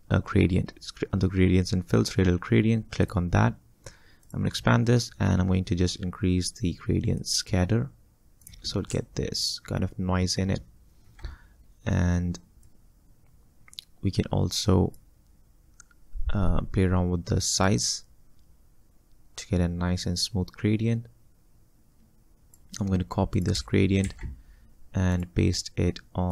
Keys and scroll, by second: 24.1 ctrl+c.